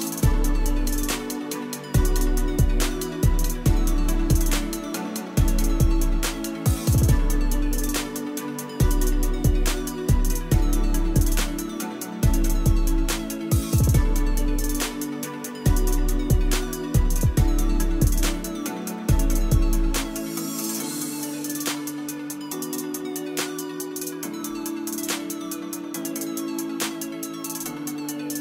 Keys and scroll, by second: 7.2 F1, 8.1 KP_0, 8.2 KP_0, 9.0 Return, 14.9 KP_5, 16.4 KP_1, 16.5 KP_0, 16.8 Return, 23.9 KP_2, 23.9 KP_0, 24.1 Return.